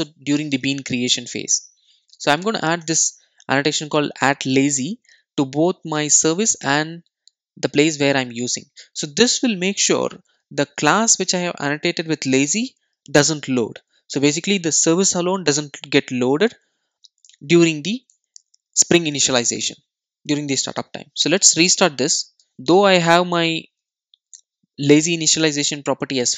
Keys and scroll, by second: 2.9 Return, 22.4 super+r.